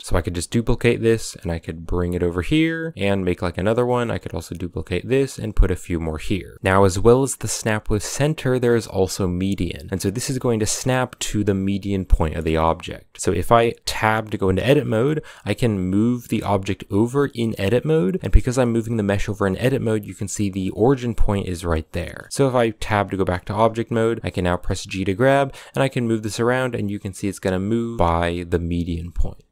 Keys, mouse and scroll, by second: 0.0 scroll down 1, 0.2 shift+d, 3.5 shift+d, 4.6 shift+d, 5.6 a, 5.6 scroll down 2, 5.8-6.5 middle drag, 6.5 scroll up 1, 6.5 g, 12.0-12.8 middle drag, 12.8 scroll up 1, 13.1 middle click, 13.7 Tab, 15.6 g, 18.4 g, 21.8 shift+middle click, 22.3 Tab, 24.2 g, 28.5 g.